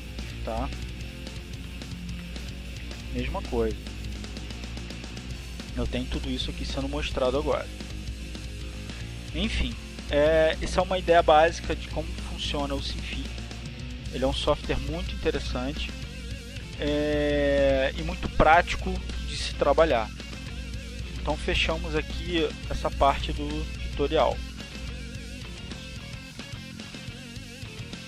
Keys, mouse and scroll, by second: 4.0 click, 4.5 click, 5.2 click, 6.3 click, 8.5-10.7 drag, 13.2 click, 23.7-25.0 drag.